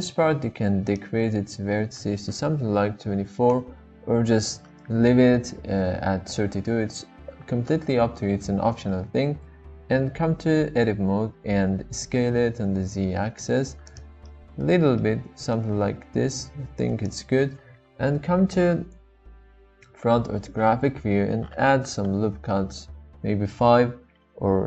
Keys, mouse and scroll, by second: 0.9-4.4 drag, 9.4 Tab, 11.7 s, 12.0 z, 13.8 click, 14.3 middle click, 15.0 middle click, 16.1 s, 17.0 click, 17.0 z, 17.9 KP_1, 21.8 ctrl+r.